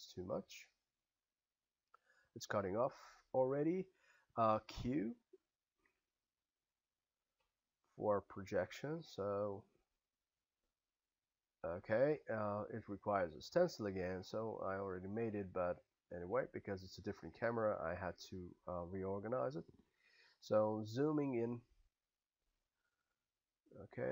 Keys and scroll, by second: 4.8 q, 20.2 s.